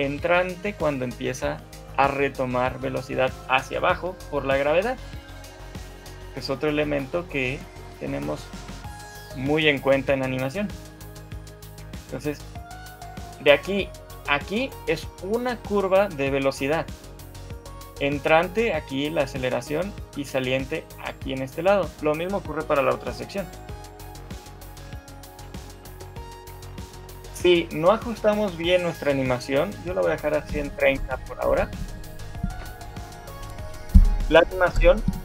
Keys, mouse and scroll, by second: 5.4 right click, 12.8 right click, 16.8 right click, 25.2 shift+middle click, 25.6-26.0 scroll up 5, 26.0 shift+middle click, 26.8 click, 27.2 shift+middle click, 31.5 shift+middle click, 31.8 scroll down 2, 32.2 shift+middle click.